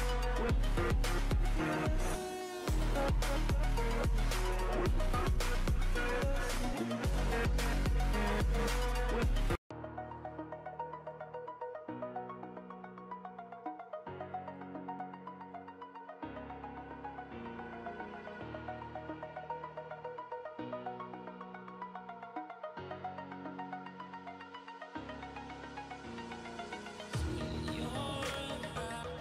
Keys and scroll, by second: 0.3 ctrl+z, 0.9 ], 0.9 ], 1.4 ], 3.6 ctrl+z, 5.9 ctrl+t, 9.3 ctrl+z, 9.6 [, 9.7 [, 14.1 ctrl+z, 17.5 ctrl+z, 25.1 ], 25.1 ], 25.7 ].